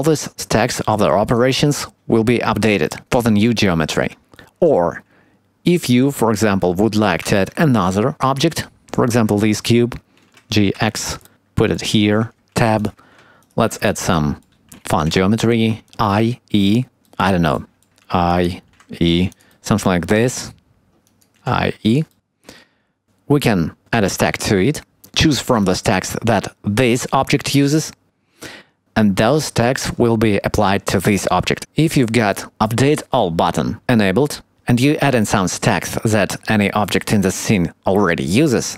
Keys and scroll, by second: 7.3 shift+a, 10.2 g, 13.3 Tab, 22.3 Tab.